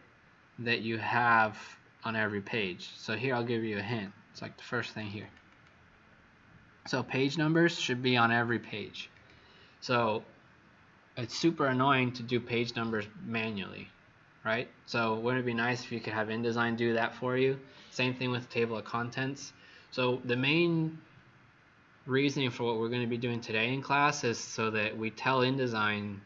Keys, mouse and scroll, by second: 0.2-0.6 scroll down 2, 1.0 scroll down 2, 1.9-2.8 scroll down 1, 2.8-3.8 scroll down 1, 4.8 click, 5.1 click, 5.4 click, 7.3 click, 8.4 click, 9.0 click.